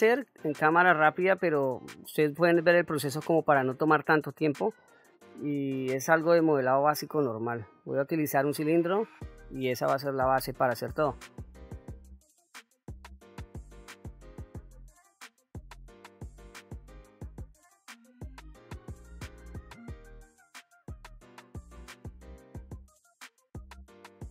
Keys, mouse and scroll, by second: 1.2-1.6 shift+middle drag, 2.1 middle click, 3.0-3.6 shift+middle drag, 4.0 middle click, 5.2-5.5 scroll up 2, 5.7-6.2 shift+middle drag, 6.6-7.0 scroll down 1, 11.9 shift+a, 12.2 shift+a, 12.8 ctrl+z, 12.9 shift+a, 14.2 KP_1, 14.3 click, 14.4 g, 14.6 click, 14.7 r, 15.2 shift+middle click, 15.6 click, 15.9-17.4 typing, 16.1 click, 16.4 Tab, 16.9 click, 17.8 click, 18.0 ctrl+r, 18.4 click, 18.5 scroll down 1, 18.5 middle click, 18.7 shift+middle click, 18.7 scroll up 2, 18.9-20.7 typing, 19.0 middle click, 19.3 middle click, 19.4 shift+click, 19.5 shift+middle click, 20.1 click, 20.9 click, 21.0 middle click, 21.1 scroll down 1, 21.3 ctrl+b, 21.9 click, 22.0 middle click, 22.2 middle click, 22.4 click, 22.4 2, 22.5 middle click, 22.7 alt+click, 23.0 alt+shift+click, 23.1 scroll down 2, 23.3 ctrl+b, 23.7 scroll up 1, 23.8-24.2 scroll down 3, 24.1 click, 24.2 middle click.